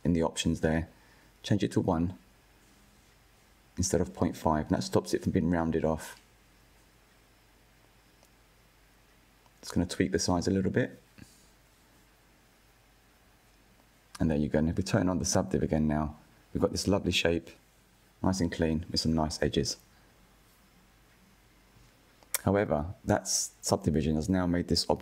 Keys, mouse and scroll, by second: 0.2-1.7 drag, 1.7-4.5 middle drag, 4.5-5.2 scroll up 1, 5.4-8.4 shift+drag, 12.4-13.0 scroll down 4, 13.0 Tab, 13.7 click, 14.8 click, 15.5 click, 15.8-18.7 middle drag, 18.7 click, 20.1 KP_1, 21.0 scroll up 3, 21.7-24.2 shift+middle drag, 24.2-24.6 scroll down 3, 24.6-25.0 shift+middle drag.